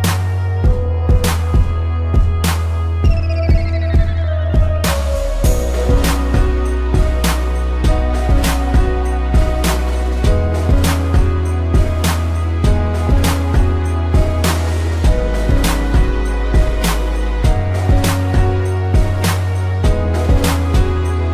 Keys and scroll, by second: 1.5 space, 6.3 p, 6.9 space, 10.8 space, 13.1 space, 14.0 p.